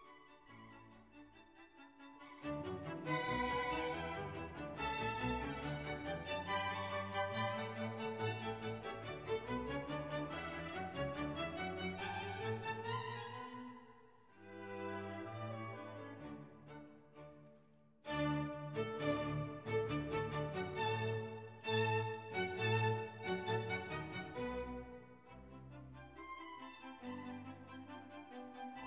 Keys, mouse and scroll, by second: 1.4-9.8 drag, 11.3 click, 13.2 click, 14.5 click, 15.2-16.5 typing, 18.2 space, 18.9 shift+., 19.2 shift+space, 27.6 BackSpace.